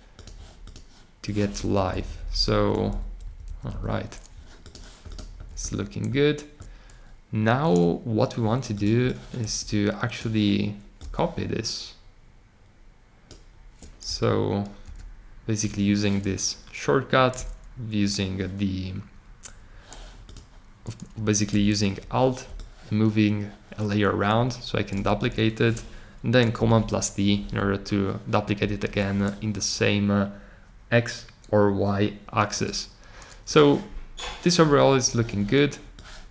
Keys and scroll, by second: 1.7 Down, 1.9 Down, 2.0 Down, 2.1 Down, 2.3 Down, 2.4 Down, 2.7 Down, 2.9 Down, 3.2 Up, 3.4 Up, 3.7 Up, 14.8 super+d, 26.5 super+d, 27.3 super+z, 28.6 super+z.